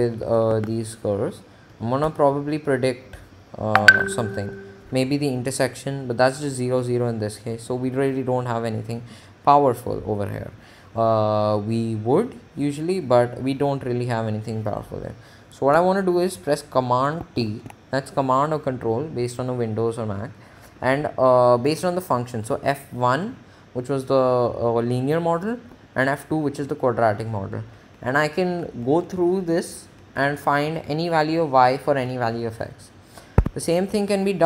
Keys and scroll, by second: 0.7 Tab, 1.1 Up, 7.0 Return, 17.7 t, 22.1 Right, 25.9 Left, 26.9 Down, 33.6 Escape.